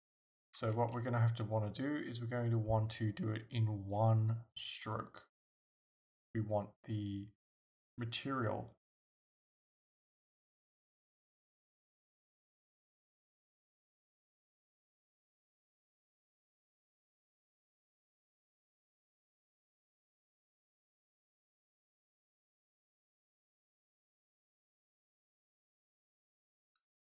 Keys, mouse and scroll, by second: 0.2 ctrl+z, 3.4-27.0 drag.